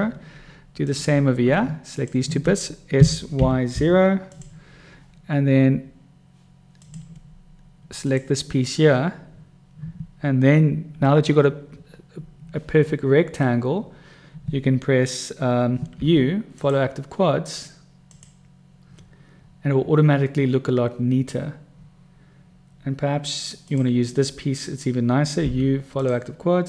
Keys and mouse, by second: 1.0 click, 2.2 shift+click, 3.3 s, 7.1 click, 8.4 click, 16.1 u, 23.9 click, 25.8 u.